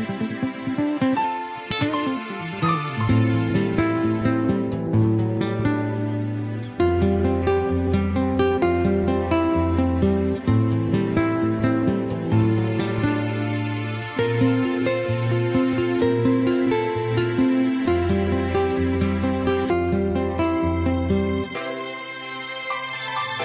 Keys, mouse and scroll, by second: 2.6-4.6 scroll up 3, 4.6 s, 9.3 click, 10.0 middle click, 13.9-15.0 shift+scroll up 1, 15.0-15.8 scroll up 2, 15.8-17.0 shift+scroll up 1, 17.6 scroll up 1.